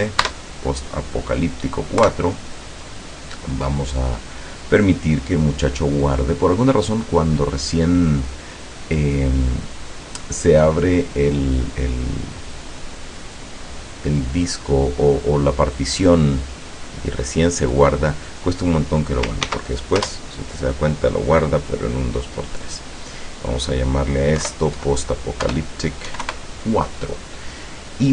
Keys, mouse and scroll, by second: 0.2 KP_Add, 2.1 KP_Enter, 19.5 ctrl+s, 20.1 ctrl+Return, 22.8 click, 23.3 click, 24.5 BackSpace, 24.8 KP_5, 25.5 BackSpace, 26.1 KP_4, 26.3 KP_Enter.